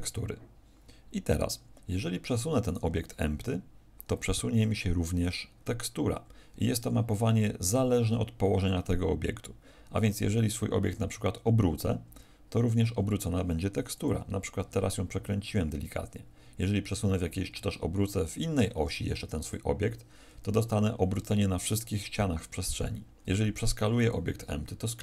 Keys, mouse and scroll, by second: 1.8 Escape, 2.6 right click, 3.3 click, 7.2 Escape, 13.9 click, 16.7 Escape, 18.3 Escape, 18.3 r, 19.4 click, 22.7 Escape, 23.3 s, 24.0 click.